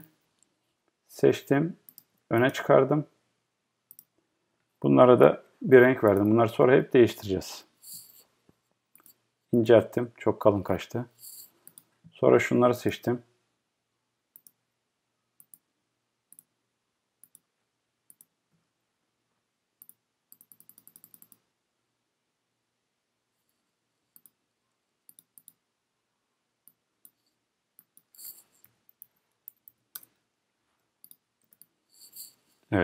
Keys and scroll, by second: 29.9 Return.